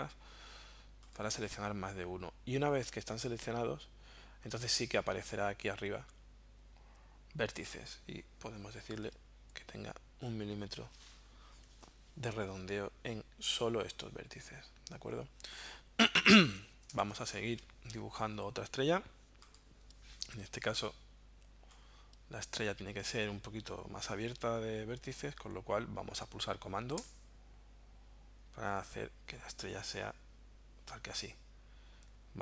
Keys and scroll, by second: 17.0 space.